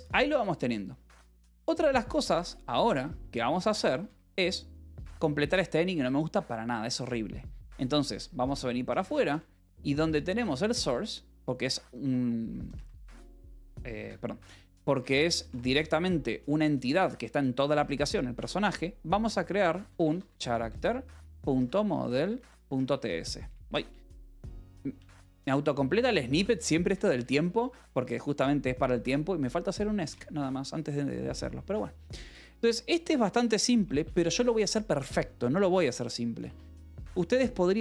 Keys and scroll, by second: 1.0-5.3 typing, 5.8 Escape, 7.6 shift+;, 9.8 j, 10.5 k, 10.8 Return, 11.9-17.0 typing, 13.9 Escape, 16.6 Return, 18.5 Return, 19.3-25.8 typing, 26.8 Escape, 27.1 Return, 27.6 y, 30.0 Return, 32.9-34.5 typing, 36.3 alt+Tab, 36.3 a.